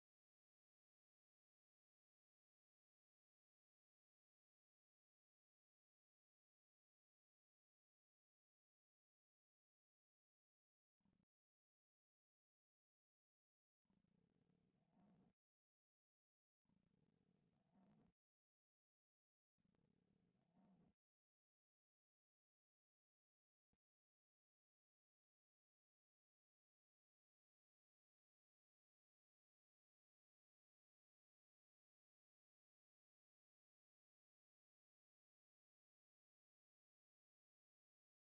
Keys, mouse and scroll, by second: 2.1 w, 2.6 a, 4.4 click, 9.3 f, 9.7 a, 10.0 click, 11.9 shift+click, 12.2 f, 12.5 a, 12.8 click, 13.4 shift+click, 13.9 f, 14.2 a, 14.7-15.8 middle drag, 16.0 middle click, 16.5 middle click, 18.5 ctrl+x, 20.3 shift+click, 21.0 f, 22.2 a, 25.8 click, 27.1 alt+click, 27.8 ctrl+x, 28.6 click, 28.8 x, 30.9-33.6 middle drag, 33.6 middle click, 35.5 click, 36.9 click, 37.2 shift+v, 38.1 click.